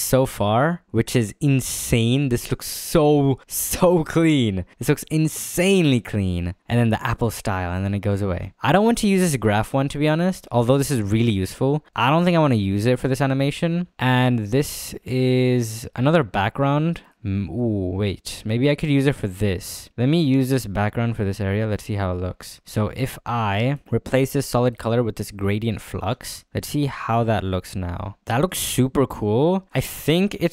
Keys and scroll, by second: 11.3 space, 13.1 f, 26.1 space, 26.7 space.